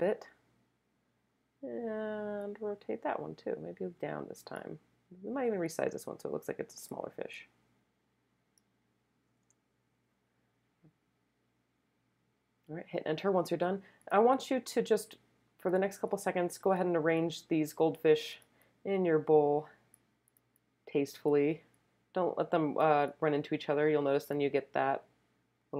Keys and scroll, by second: 9.4 Return.